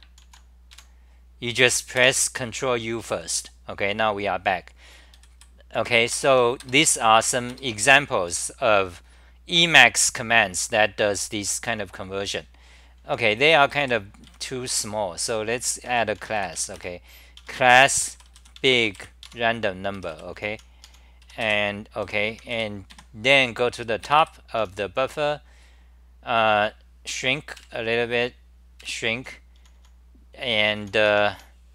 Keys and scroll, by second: 0.2 ctrl+u, 1.9 a, 2.0 Return, 4.9-5.8 typing, 8.4 super+r, 13.4 d, 15.9 l, 16.1 u, 17.4 Home, 17.9 u, 18.6 Home, 18.9 F10, 19.2 Home, 19.7-23.4 typing, 24.6 t, 27.1 super+-, 27.6 super+-, 29.6 s, 31.1 o, 31.4 o.